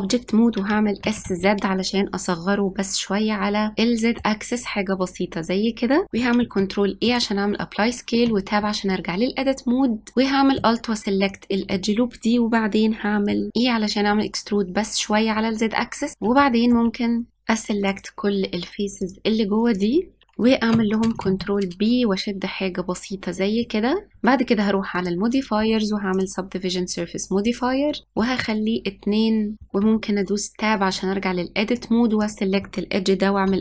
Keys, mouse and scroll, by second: 0.8 s, 3.7-6.0 middle drag, 6.0 click, 6.2 ctrl+a, 8.0 Tab, 10.1 click, 11.1 alt+click, 13.1 middle click, 13.5 e, 16.1 middle click, 16.7 shift+click, 16.8 middle click, 16.9 shift+click, 17.6 middle click, 17.7 click, 17.9 click, 18.0 middle click, 18.2 click, 18.3 middle click, 18.7 shift+Left, 18.8 shift+Left, 18.8 click, 18.8 middle click, 19.0 shift+Left, 19.2 shift+Left, 19.3 middle click, 19.4 shift+Left, 19.4 click, 19.5 shift+Left, 19.6 shift+Left, 19.6 middle click, 19.7 shift+Left, 19.7 click, 19.8 shift+Left, 19.8 shift+Left, 19.8 shift+click, 20.0 middle click, 20.4 ctrl+b, 24.0 middle click, 24.4 click, 26.0-27.4 drag, 28.1-29.5 drag, 29.5 middle click, 29.6-30.2 scroll down 1, 30.2 Tab, 32.1 click.